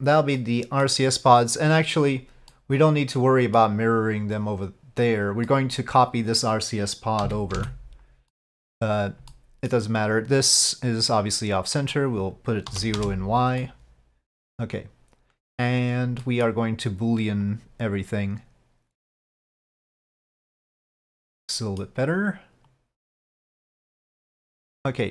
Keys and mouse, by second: 0.5 middle click, 2.6-3.7 middle drag, 5.7 middle click, 8.5-8.8 middle drag, 9.4-9.8 middle drag, 12.0-13.2 drag, 13.8-15.7 middle drag, 16.3 middle drag, 17.5 click, 18.5-20.2 drag, 20.5-21.9 middle drag, 22.8 click, 24.2 click.